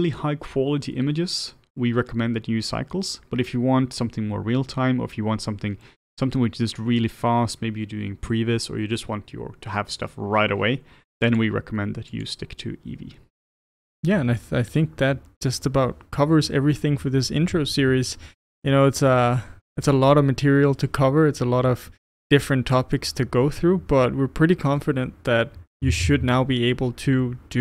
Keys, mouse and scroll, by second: 12.4-27.6 drag.